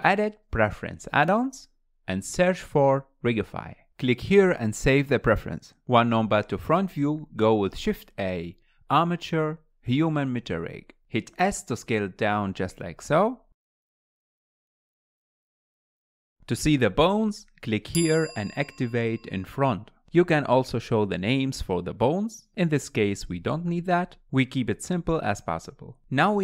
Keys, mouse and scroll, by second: 0.0-2.0 drag, 6.2 click, 6.4 KP_1, 7.2 shift+a, 13.2 s, 16.7 alt+z, 17.3 click, 18.7-21.0 drag, 22.1 click, 23.4 click, 24.0 scroll down 2, 26.3 click.